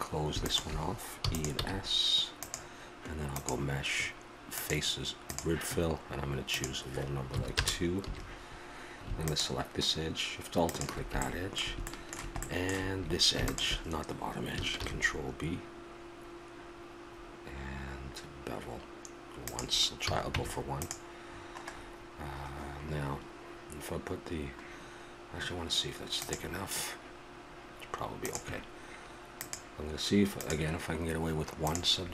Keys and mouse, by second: 0.4 click, 1.2 e, 6.5-8.4 drag, 8.0 a, 9.3-12.4 drag, 12.4 middle click, 13.4-14.7 middle drag, 14.7 ctrl+b, 14.7 click, 20.1 a, 20.3 Tab, 29.4-31.4 drag, 31.6-32.1 drag.